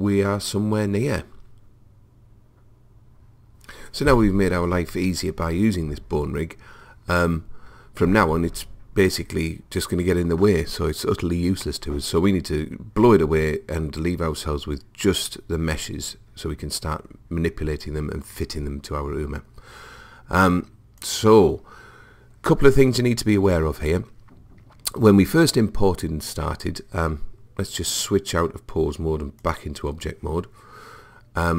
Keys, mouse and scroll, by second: 21.0 click, 27.9 click.